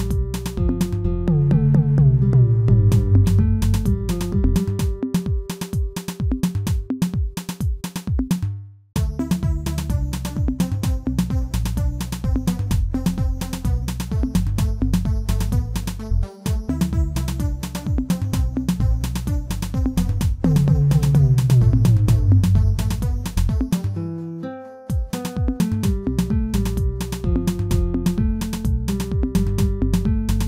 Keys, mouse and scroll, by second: 15.3 middle click, 15.9 scroll up 1, 16.2-17.2 shift+middle drag, 17.2 Tab, 17.8 ctrl+a, 19.3 Tab, 20.3 ctrl+b, 23.7 Tab, 24.0-24.4 scroll down 2, 24.4-25.0 middle drag, 25.0 Tab, 25.3-25.7 scroll up 1, 25.7-26.8 shift+middle drag, 26.8 ctrl+r, 30.2 ctrl+r.